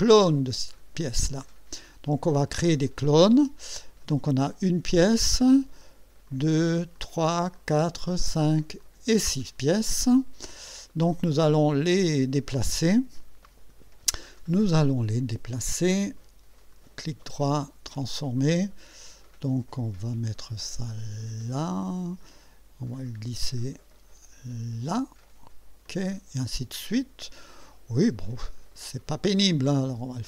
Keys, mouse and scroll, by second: 0.8 click, 6.3 click, 7.0 click, 7.6 click, 8.2 click, 8.8 click, 12.9 click, 16.7 right click, 17.9 click, 20.4-22.2 drag, 23.4-25.0 drag, 25.9 click, 27.5 click, 28.2 right click, 29.5 click.